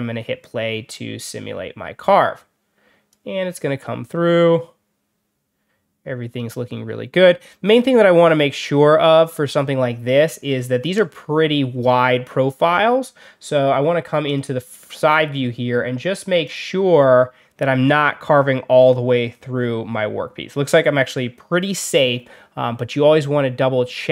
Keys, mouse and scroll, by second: 0.8-3.0 drag, 14.2 click, 16.3 click, 17.8 scroll down 2, 18.2 scroll up 2, 18.2-18.9 scroll down 4.